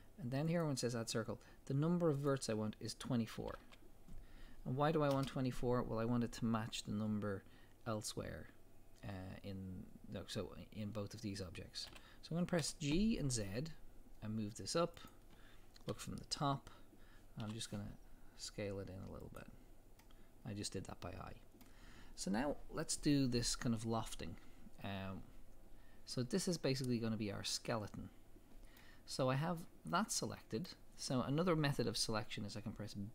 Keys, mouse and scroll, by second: 0.5 click, 2.2-15.1 drag, 5.2 Return, 11.9 g, 15.9 KP_7, 17.4 s, 19.4 click, 20.0-29.1 middle drag, 29.1-29.5 scroll up 1, 29.7-30.2 scroll down 1, 30.2 middle click, 30.8 middle click.